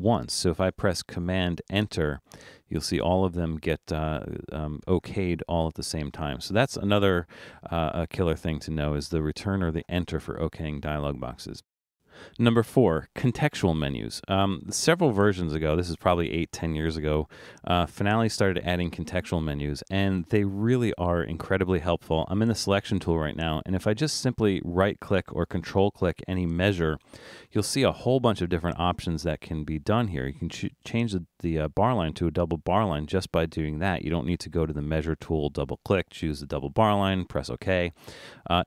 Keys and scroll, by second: 34.6 super+z.